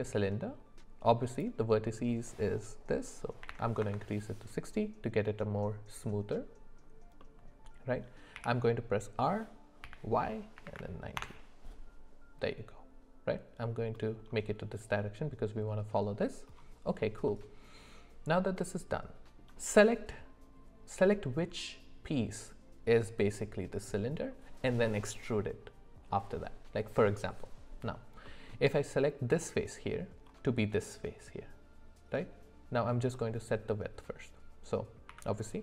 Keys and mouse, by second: 1.3-3.8 drag, 3.8 Up, 7.2 middle click, 8.3 r, 13.9 middle click, 17.3-19.4 middle drag, 28.2 middle click, 33.1 middle click, 35.1 s.